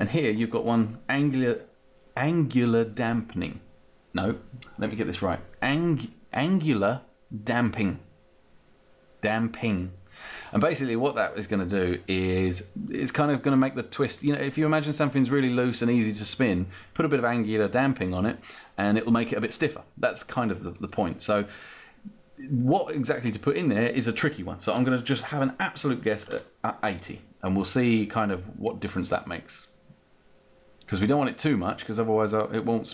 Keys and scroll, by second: 25.8-26.8 typing.